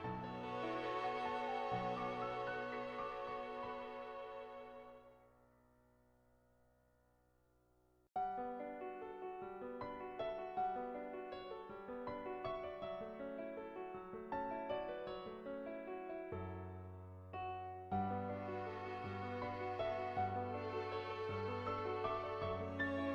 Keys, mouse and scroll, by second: 0.2-1.2 middle drag, 1.7 middle click, 3.3-4.6 middle drag, 5.8 click, 6.2 shift+click, 6.5 middle click, 7.2 click, 7.8 click, 8.1 middle click, 9.1 middle click, 10.9 shift+middle click, 11.1 middle click, 11.7 shift+middle click, 14.1 g, 16.1 r, 17.9 shift+middle click, 18.7-20.1 shift+middle drag, 21.0 g.